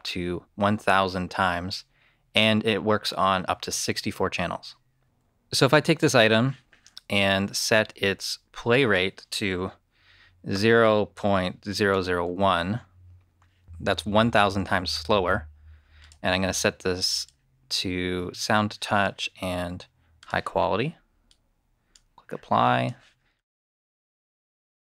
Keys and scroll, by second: 10.4-12.1 typing.